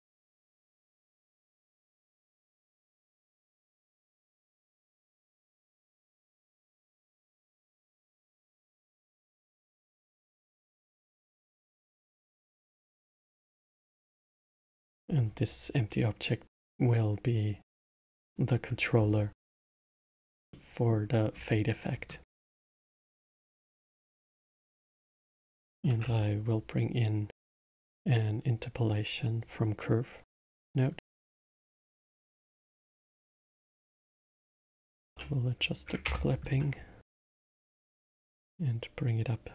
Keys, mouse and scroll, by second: 0.3 click, 0.5-3.6 drag, 12.2 click, 17.9-20.5 drag, 20.5-21.3 middle drag, 21.3 scroll up 1, 21.9-22.3 scroll down 2, 22.3 scroll up 1, 23.3-25.8 middle drag, 25.8 shift+a, 32.1-35.2 drag, 38.2-39.5 drag.